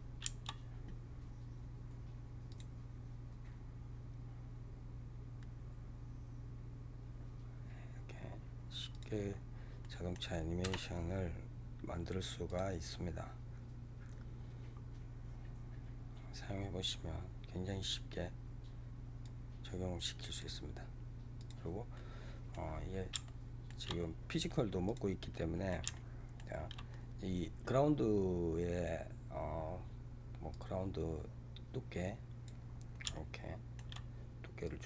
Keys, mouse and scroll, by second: 2.4 click, 8.8 click, 9.2 scroll down 3, 9.7-10.5 middle drag, 10.5 KP_0, 12.3 click, 19.2-21.8 drag, 21.8-22.6 middle drag, 22.6 scroll down 3, 23.1-23.9 shift+middle drag, 23.9-24.4 scroll down 10, 24.8 click, 25.2-28.8 middle drag, 30.4-32.6 drag, 32.6 scroll down 2, 33.0-34.5 shift+middle drag, 34.5-34.8 drag.